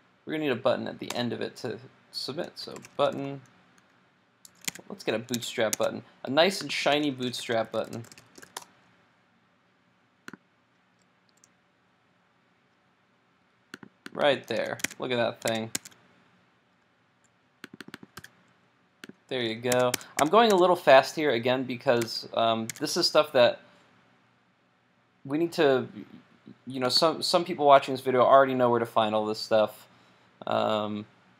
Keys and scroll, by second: 4.7 super+Tab, 5.5 super+Tab, 14.6 super+c, 14.9 super+Tab, 15.6 super+Tab, 18.2 super+v, 22.0 super+Tab.